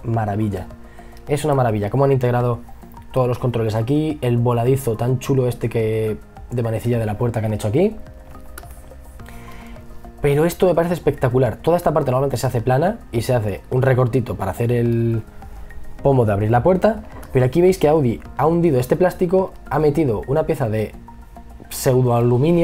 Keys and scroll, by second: 8.1 e, 9.4 b, 16.7 e, 17.7 b.